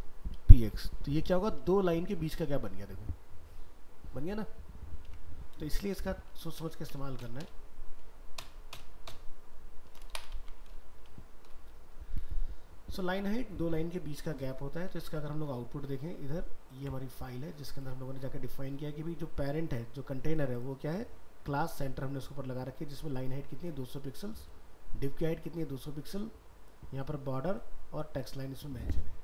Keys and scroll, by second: 1.1 ctrl+s, 1.6 alt+Tab, 5.1 alt+Tab, 6.3 ctrl+z, 10.7 alt+Tab, 14.9 alt+Tab.